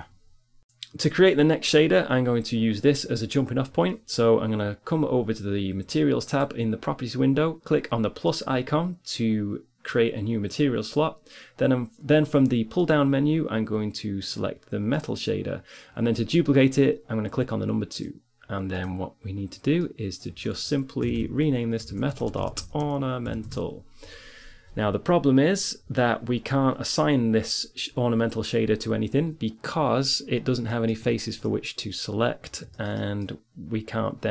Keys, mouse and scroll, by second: 0.6 click, 5.7-15.5 drag, 17.4-21.2 drag, 21.2 BackSpace, 30.4 middle click, 30.8 Tab.